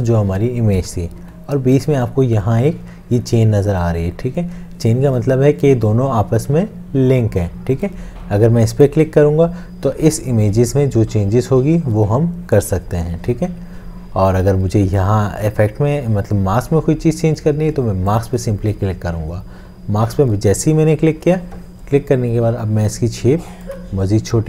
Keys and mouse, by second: 23.7 alt+click.